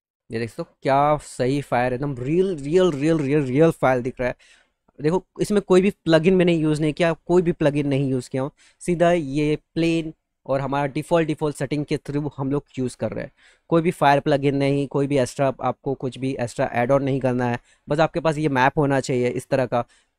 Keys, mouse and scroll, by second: 0.0 middle click, 0.7 middle click, 17.6 click, 20.0 middle click.